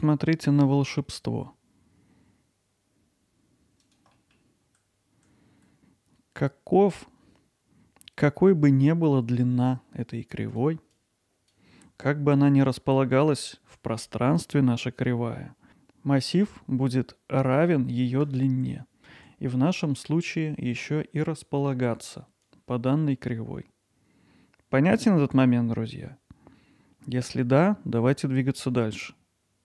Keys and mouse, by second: 2.6 click, 2.8 middle click, 3.0 alt+middle click, 3.3 ctrl+alt+middle click, 3.6 click, 4.0-4.6 right drag, 4.8 click, 5.2 alt+middle click, 11.1 click, 11.8 alt+middle click, 13.0 alt+middle click, 18.7 alt+middle click.